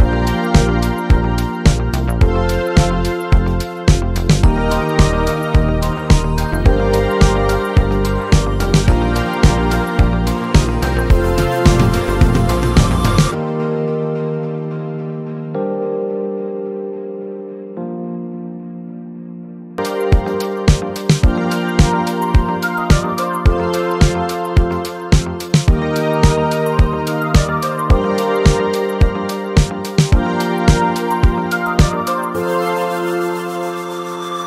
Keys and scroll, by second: 9.2 space, 15.9 space, 17.2 space, 24.9-29.2 typing, 32.1-33.4 typing.